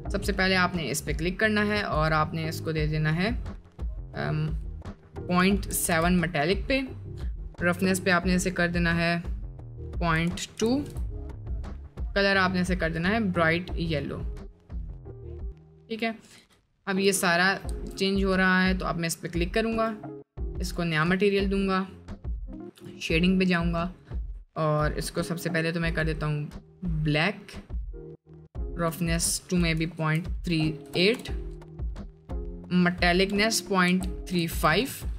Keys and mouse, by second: 0.8 middle click, 11.4 middle click, 16.3 middle click, 17.0 Tab, 17.7 Tab, 20.8-35.1 drag.